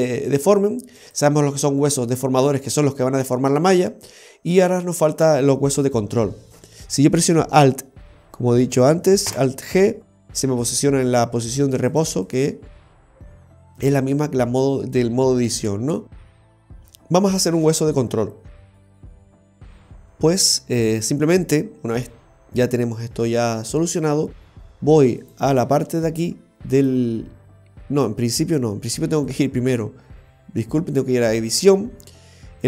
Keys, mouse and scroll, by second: 1.9 right click, 5.9 right click, 9.4 alt+g, 11.4 a, 12.0 click, 12.4 click, 15.6 click, 25.3 right click, 26.9 right click, 29.3 click, 31.3 l.